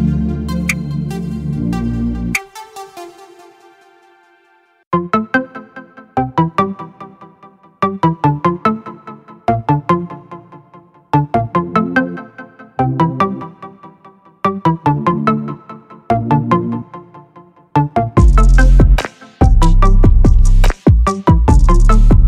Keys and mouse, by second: 7.0 click, 11.2-12.6 middle drag, 14.3-22.1 drag, 22.1-22.2 middle drag.